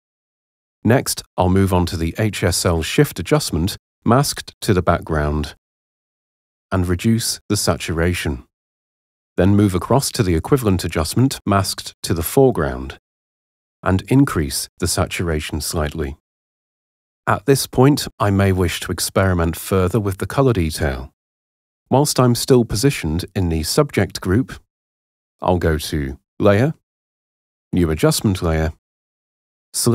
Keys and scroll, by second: 19.4 h.